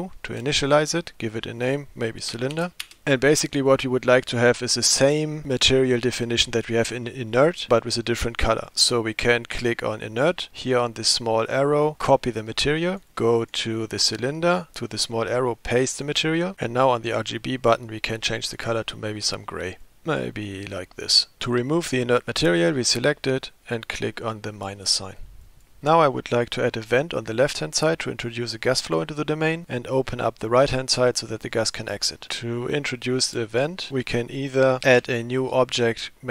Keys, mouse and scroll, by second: 0.9-3.0 drag, 6.5 click, 7.7 click, 8.8 click, 11.7-13.0 drag, 13.1 click, 14.6-16.1 drag, 18.5 click, 21.4 click, 22.9 click, 25.5 click, 25.8-26.7 middle drag, 34.9 shift+a.